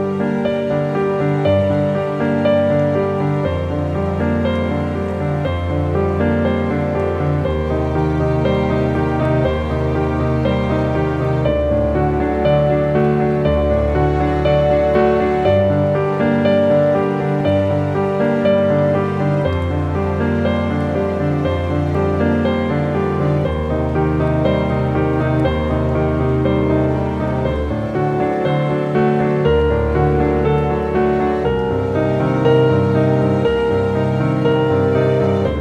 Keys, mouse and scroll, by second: 1.7 ctrl+d, 2.3 click, 5.0-20.3 drag, 20.8 click, 24.4 click, 27.6-33.3 drag.